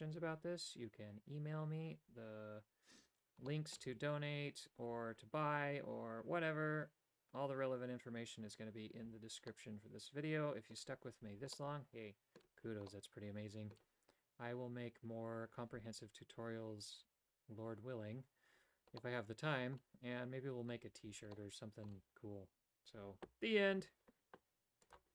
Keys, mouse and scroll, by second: 3.5 shift+middle click, 9.5-10.9 middle drag, 11.7 middle click, 13.0 middle click, 19.1 middle click, 21.1 Tab, 21.5 middle click.